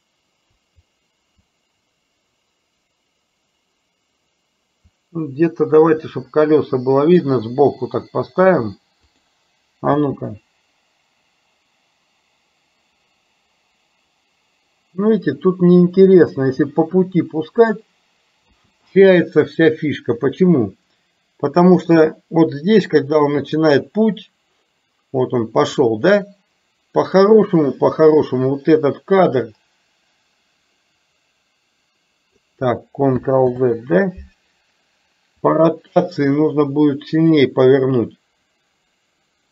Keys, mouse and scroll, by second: 10.0 space, 18.5 space, 21.8 click, 23.7-25.9 drag, 29.3-32.4 drag, 33.5 ctrl+z, 35.5-37.5 drag.